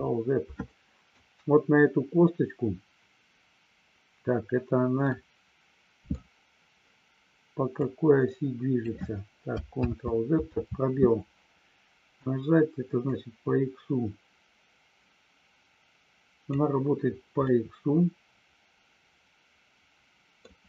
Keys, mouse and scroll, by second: 0.7 middle click, 5.1-6.1 middle drag, 7.8-8.8 drag, 10.0 ctrl+z, 10.6 space, 13.1-16.6 drag, 17.5-20.5 middle drag.